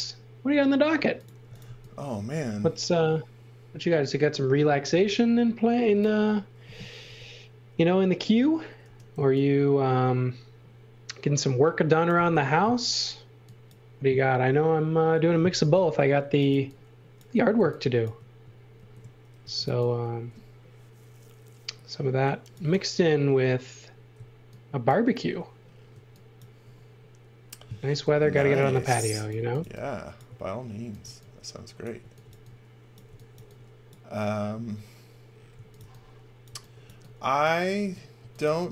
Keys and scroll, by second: 1.2-2.1 typing, 7.0 l, 8.8 e, 15.5 super+z, 16.0-17.3 typing, 18.7-20.1 typing, 22.6 e, 28.1-33.3 typing, 35.2-36.8 typing, 38.1 x, 38.4 v.